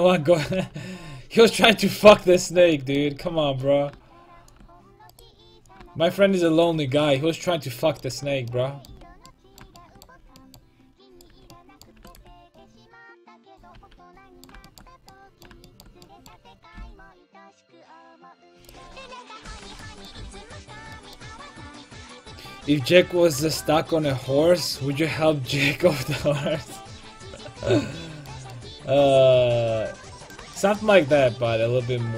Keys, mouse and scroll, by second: 0.3 ctrl+t, 0.5 a, 2.3 right click, 4.3 click, 6.7 a, 7.0 click, 7.4 middle click, 7.7 middle click, 8.2 Tab, 11.2-12.2 right drag, 11.3 Tab, 12.0 Tab, 12.2 Tab, 13.8 a, 16.8 c, 19.5 ctrl+l, 20.2 g, 27.1 middle click, 28.1 middle click.